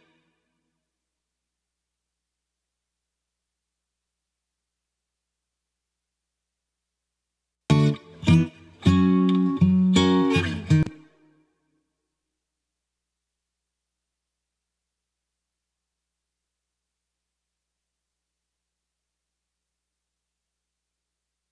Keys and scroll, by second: 0.6 super+space, 7.4 space, 10.6 space, 17.9 super+z, 21.4 space.